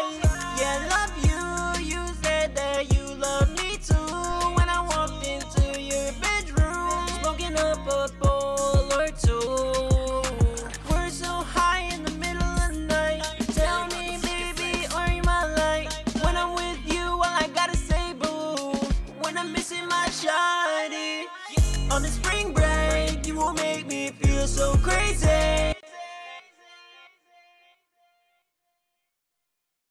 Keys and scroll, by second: 4.2 ctrl+super+w, 4.5 super+s, 16.5 super+s, 18.9 super+Tab, 19.8 super+Tab, 23.0 super+Tab, 24.1 super+`, 25.4 Return, 25.5 Return, 27.1 shift+r, 27.4 Return, 27.5 Return.